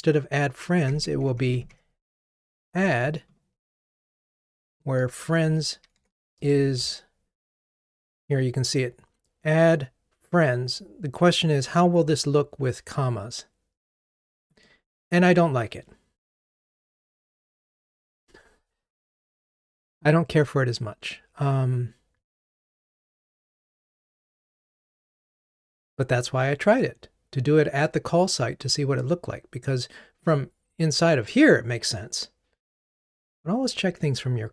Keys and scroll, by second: 5.1 super+a, 5.4 super+x, 10.7 super+v.